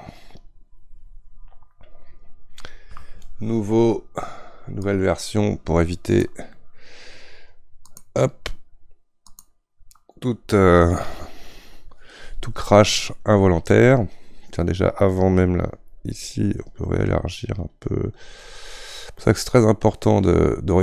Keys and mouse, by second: 0.4-5.4 drag, 15.2-20.8 drag.